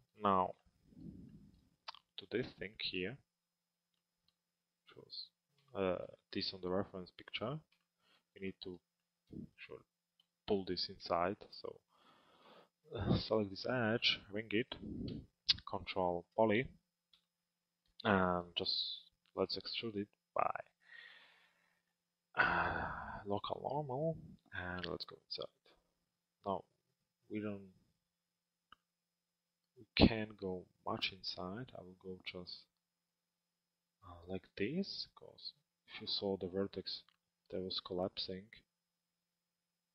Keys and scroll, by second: 9.9 z.